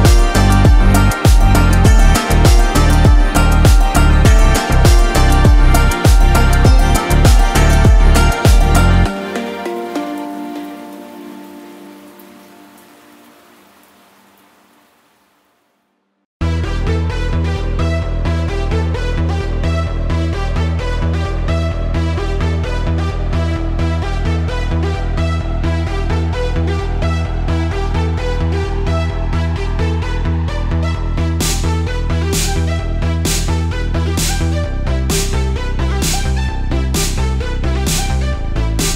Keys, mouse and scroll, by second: 1.7 click, 2.6 Tab, 3.1 right click, 4.3 Tab, 6.5 ctrl+r, 10.7 middle click, 12.0 ctrl+r, 19.2 right click, 19.7 middle click, 20.7 Tab, 21.6-22.4 middle drag, 23.0 s, 23.4 x, 26.2 click, 26.6-27.3 middle drag, 27.3-27.8 scroll down 2, 27.8 s, 28.3 z, 30.5 click, 30.8-32.2 middle drag, 32.3 Tab, 32.7-33.5 scroll up 1, 33.5 3, 34.3 shift+click, 34.9 shift+scroll up 1, 34.9 shift+middle click, 35.4-37.0 scroll up 2, 37.0 u.